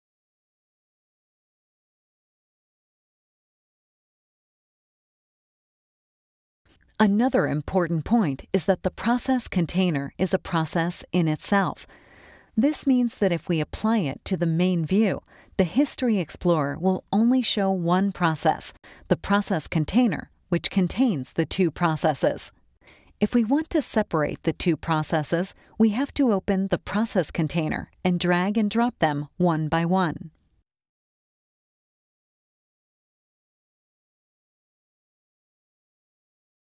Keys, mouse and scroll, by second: 0.7 click, 1.9 click, 5.4 click, 13.7-14.9 drag, 16.0 right click, 17.1 click, 18.9 click, 21.0 click, 25.5 click, 28.6 click, 31.1-32.8 drag, 34.0-35.1 drag, 36.3 right click.